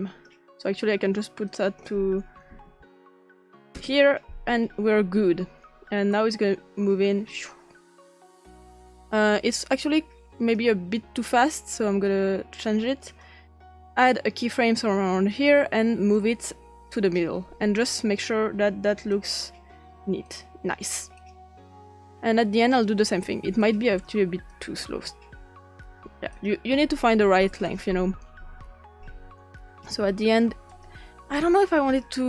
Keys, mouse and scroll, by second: 1.5 click, 2.3-4.2 typing, 6.1-10.6 drag, 11.2-12.7 drag, 13.1 click, 13.7 click, 15.3 click, 16.1 click, 17.9 click, 19.1 click, 20.2 click, 21.1 click, 22.1 click, 23.6 click, 24.5 click, 26.3 click, 27.6 click, 29.5-29.9 drag, 30.7 click.